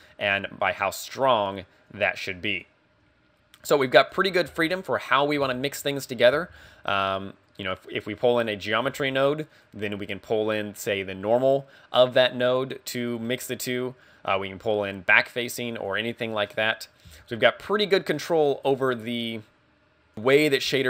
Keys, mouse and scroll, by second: 2.0 click, 4.1 click, 4.6 x, 6.5 shift+a, 8.9 g, 9.7 click, 13.3 middle click, 15.8 click, 17.2 x, 17.7-18.0 scroll down 2, 18.0 middle click, 20.1 click, 20.2 scroll down 1, 20.3 click.